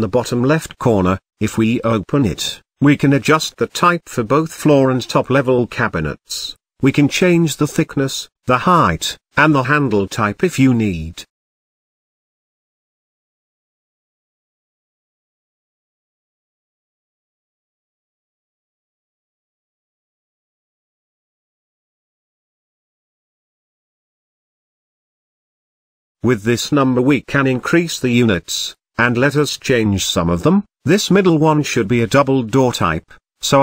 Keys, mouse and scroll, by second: 1.1-3.0 drag, 3.6-4.9 drag, 5.8-7.6 drag, 8.4-9.3 shift+middle drag, 9.3-11.1 drag, 11.2-13.1 drag, 15.1-16.2 drag, 16.2 middle click, 17.1-17.6 scroll up 4, 17.6-18.1 scroll down 3, 18.1-20.5 middle drag, 21.8-26.4 drag, 27.0-28.9 drag, 28.9-29.3 scroll down 2, 29.3-31.2 shift+middle drag, 33.4-33.6 drag.